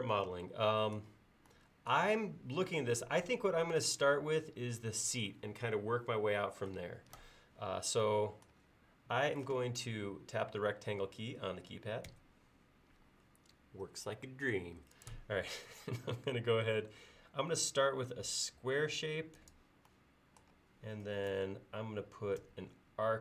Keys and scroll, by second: 12.1 r, 22.4 a.